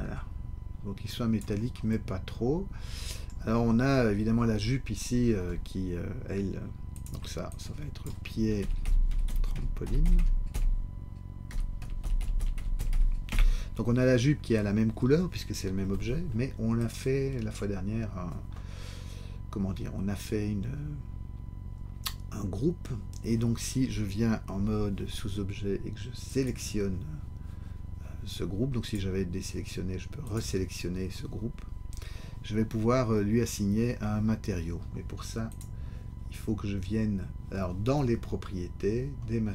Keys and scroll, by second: 8.6-12.0 typing, 13.3 Return, 24.5 Tab.